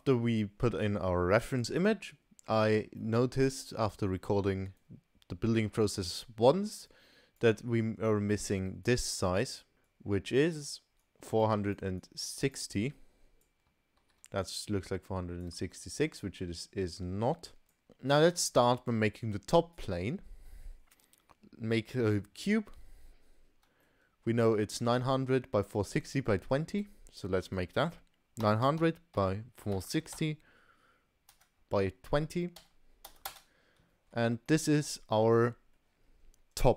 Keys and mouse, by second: 0.4 middle click, 1.4 middle click, 3.0 middle click, 6.9 click, 8.9 click, 9.9-10.9 drag, 11.0 click, 11.6 click, 12.0 click, 12.8 click, 14.1 ctrl+z, 14.7 click, 15.6 ctrl+z, 16.2-17.8 drag, 17.8 shift+a, 23.9 middle click, 25.0 middle click, 27.7-34.2 drag, 28.8 0, 34.5-34.9 middle drag, 35.3-35.8 middle drag.